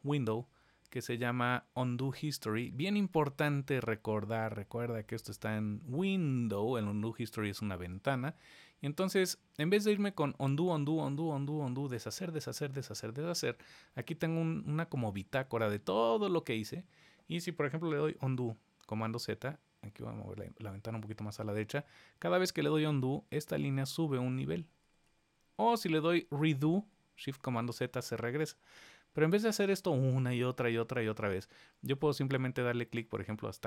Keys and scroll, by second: 18.3 super+z, 21.7 super+z, 22.3 super+z, 22.9 super+z, 23.7 super+z, 25.9 shift+super+z, 26.3 shift+super+z.